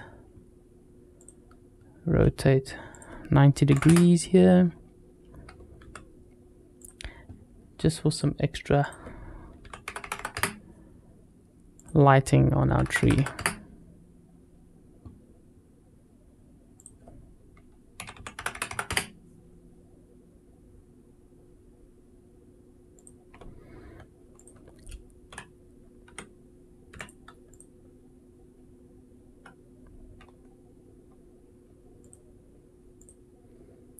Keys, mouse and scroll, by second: 1.0 click, 2.7-4.4 drag, 5.6 g, 7.9 click, 8.6-11.3 drag, 9.8 KP_0, 10.0 KP_0, 11.6-13.8 drag, 12.8 KP_0, 12.9 KP_0, 16.6-19.4 drag, 18.4 KP_0, 18.5 KP_0, 22.8 click, 24.2 click, 25.1 z, 26.7 x, 27.3 click, 31.8 click, 32.8 click.